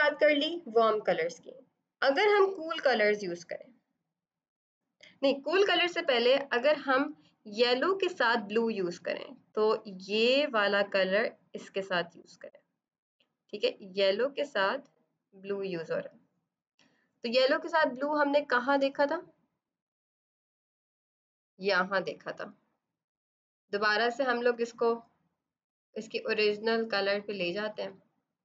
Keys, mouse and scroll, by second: 10.0 click, 18.7 F7, 19.9 click, 23.1 click, 24.7 click, 25.2 click, 25.7 click, 26.2 click, 26.7 click, 27.2 click.